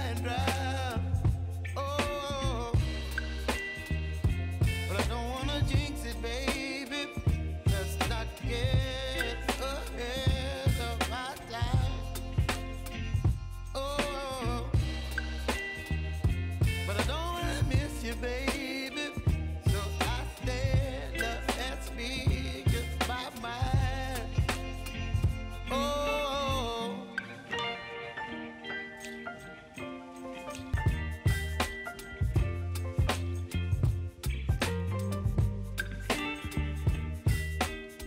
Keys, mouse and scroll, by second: 3.7 ctrl+i, 5.0 click, 5.5 Return, 7.9-9.9 drag, 11.8 s, 12.9-20.3 drag, 20.7 u, 21.8 click, 24.9 click, 27.6 right click, 29.4 click, 35.2-38.0 drag.